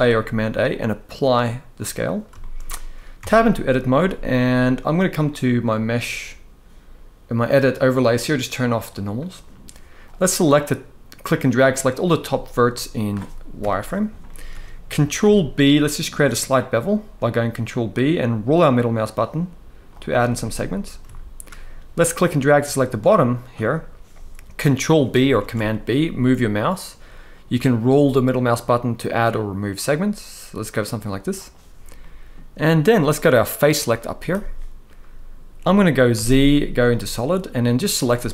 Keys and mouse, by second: 2.1 shift+middle drag, 2.9 Tab, 3.7 z, 5.3-9.0 drag, 9.7-11.2 drag, 12.4-12.7 middle drag, 13.3 KP_1, 13.9 shift+middle drag, 14.9 ctrl+b, 19.6 click, 20.8-21.2 shift+middle drag, 21.9-23.2 drag, 25.1 ctrl+b, 31.7 middle click, 35.8 z, 38.1 middle click.